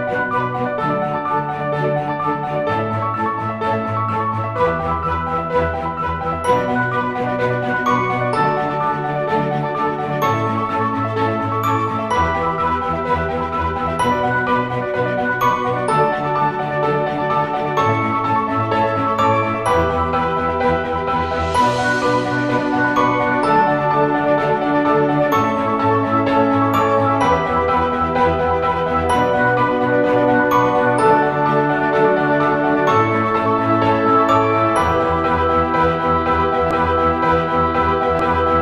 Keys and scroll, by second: 4.6 /, 4.6 ], 8.9-9.6 typing, 11.0-12.2 typing, 13.5 typing, 15.0-20.8 typing, 23.9-24.5 typing, 34.0-34.8 typing.